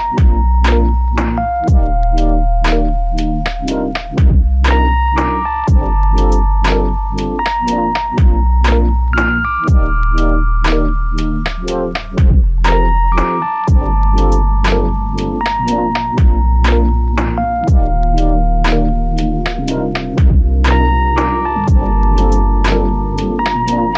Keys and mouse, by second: 1.1 alt+click, 2.3 double click, 2.8 alt+click, 3.9 double click, 5.5 alt+click, 7.1 double click, 8.1 shift+click, 9.3 shift+click, 9.6 shift+double click, 9.9 shift+click, 10.5 alt+click, 11.4 double click, 14.5 alt+click, 15.7 ctrl+alt+click, 16.9 alt+click, 20.6 double click.